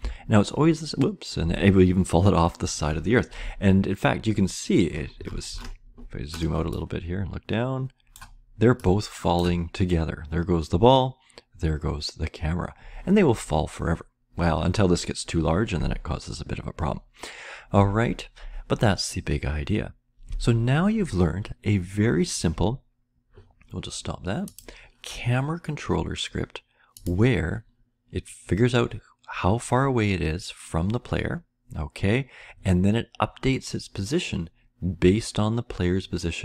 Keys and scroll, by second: 0.5-1.4 Up.